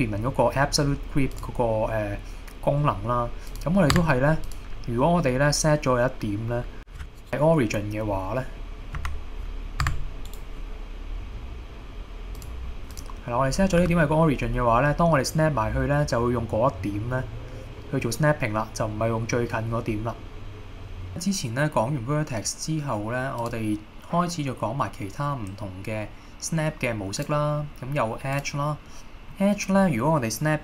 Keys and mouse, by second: 1.4 click, 2.9 middle click, 4.0 Tab, 4.5 click, 6.9 shift+s, 7.2-8.7 right drag, 9.0 Escape, 9.9 Tab, 10.3-12.5 right drag, 13.0-13.9 drag, 13.9 g, 21.1 drag, 23.5-28.1 drag, 28.5-29.4 drag, 29.4 middle click.